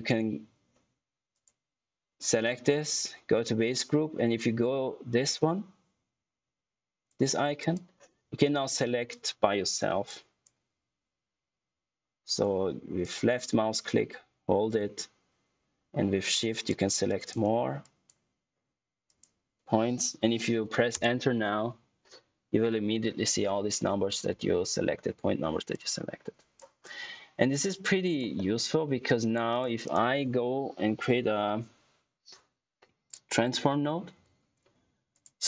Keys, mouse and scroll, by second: 1.2 click, 7.5 click, 10.0 shift+click, 12.9 shift+click, 20.9 Return, 25.6 click, 26.9 scroll down 1, 27.5 click, 28.3 middle click, 29.0 click, 29.8 right click, 31.0 t, 33.3-34.1 typing, 35.0 click.